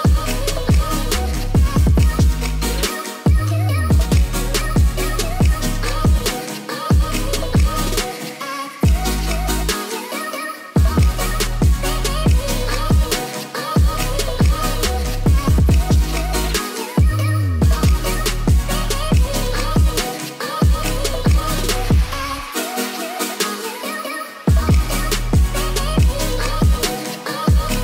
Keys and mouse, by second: 2.1-4.9 drag, 8.5 drag, 9.2 drag, 11.4 click, 12.5-15.0 drag, 16.8-18.0 drag, 19.9 ctrl+l, 23.9 shift+click, 25.0 shift+click, 25.8 ctrl+l, 27.5 ctrl+s, 27.7 click.